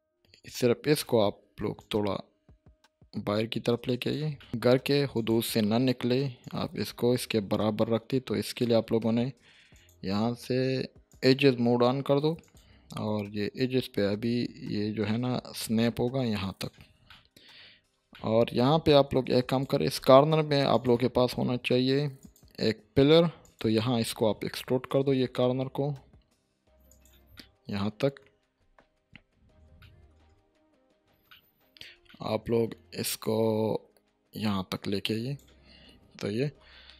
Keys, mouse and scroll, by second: 0.5-1.1 drag, 4.4 middle click, 5.1-8.6 drag, 17.1-17.7 middle click, 17.7 scroll down 1, 17.9 scroll up 1, 18.1-18.7 middle click, 19.5 click, 19.9 Tab, 20.7 click, 24.6 e, 26.9 click, 27.3-28.3 middle drag, 29.1 7, 29.8 shift+middle click, 30.3-31.3 scroll up 1, 31.3-31.9 middle drag, 33.2-35.4 drag, 35.8-36.5 scroll down 1, 36.5 Tab.